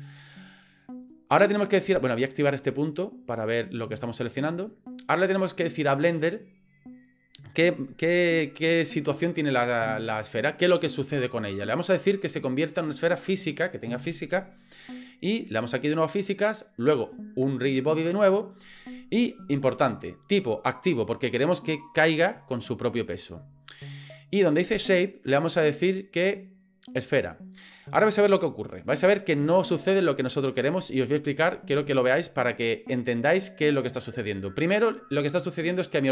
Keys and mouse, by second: 1.0 click, 3.3 click, 15.8 click, 17.7 click, 25.6 click, 32.0 drag.